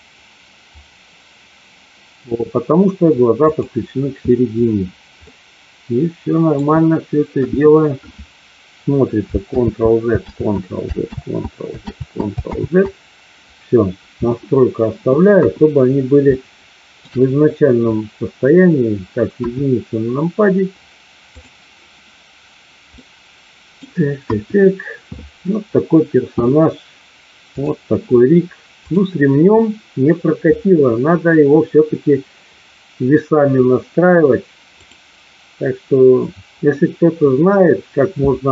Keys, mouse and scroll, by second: 5.2-6.6 middle drag, 7.2 KP_1, 9.6 ctrl+z, 10.4 ctrl+z, 11.1 ctrl+z, 12.0 ctrl+z, 12.6 ctrl+z, 15.2 KP_1, 16.2 shift+middle click, 19.4 KP_1, 21.4 click, 23.0 middle click, 24.2 KP_1, 27.5 click.